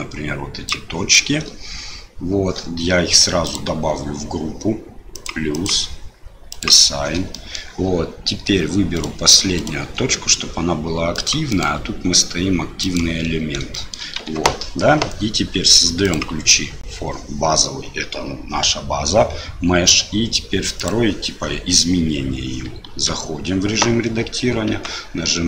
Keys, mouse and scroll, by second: 3.4 click, 5.1 click, 5.6 click, 7.3 shift+middle click, 8.9 shift+click, 9.6 shift+click, 11.2 click, 11.6-13.0 drag, 13.7 shift+middle click, 14.3 Tab, 16.1-17.3 drag, 22.8 Tab, 24.7 s.